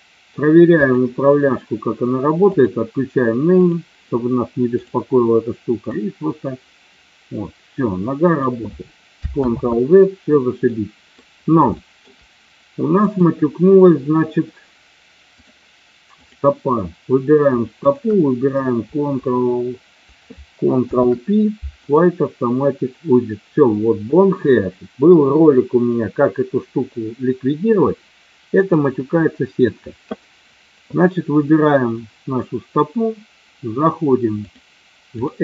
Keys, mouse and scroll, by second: 0.8 click, 2.5 click, 3.6 click, 4.8 click, 6.0-8.4 drag, 9.5 ctrl+z, 10.6-11.1 middle drag, 11.6-12.0 shift+middle drag, 13.1-15.5 drag, 17.7 shift+click, 20.7 ctrl+p, 28.6 click, 34.3-35.4 drag.